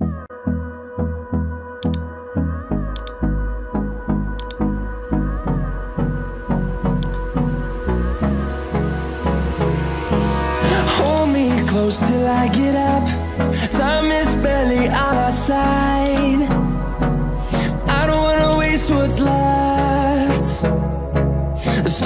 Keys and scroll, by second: 9.2 Return, 17.0 ctrl+z.